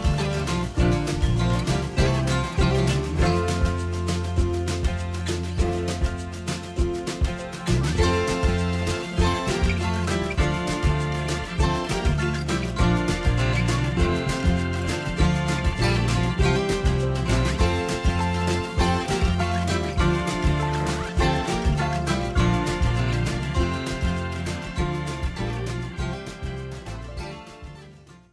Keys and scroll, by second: 9.4 i, 12.2 i.